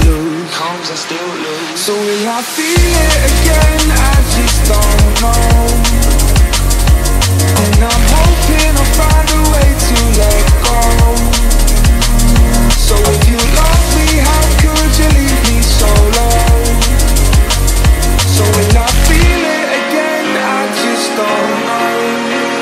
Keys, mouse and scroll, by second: 0.7 click, 1.7 click, 2.9 click, 4.0-6.9 drag, 6.9-9.8 drag, 10.7 click, 11.4 click, 13.0 space, 17.6 space, 19.1 click, 20.6-22.6 drag.